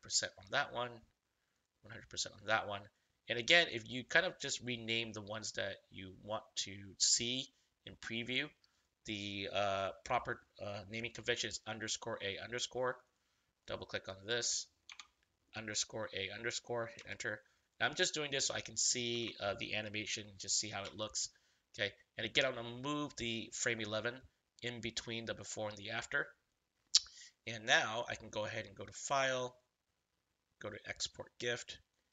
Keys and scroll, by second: 9.9 BackSpace, 10.9 a, 14.8 BackSpace, 15.5 a, 16.9 Return, 19.1 BackSpace, 20.0 a, 20.8 Return.